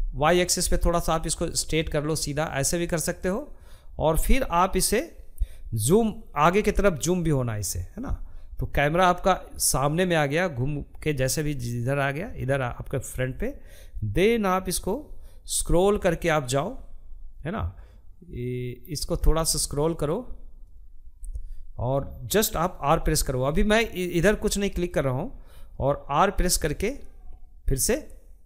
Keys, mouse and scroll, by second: 17.2-18.8 scroll up 4, 27.8 r.